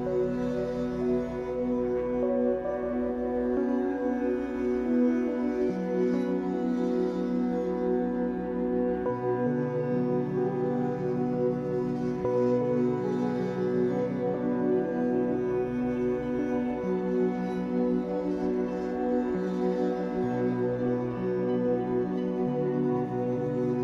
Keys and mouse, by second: 0.1 z, 0.9 click, 1.8 click, 2.2 space, 5.3 space, 5.9-7.0 alt+drag, 7.7 click, 8.4-9.5 alt+drag, 10.1 click, 10.5 ctrl+alt+click, 11.8 alt+shift+drag, 13.1 ctrl+alt+click, 13.8-14.6 alt+drag, 14.9-15.4 ctrl+alt+drag, 15.9-16.4 alt+drag, 17.2 alt+click, 20.2 space, 21.6 click.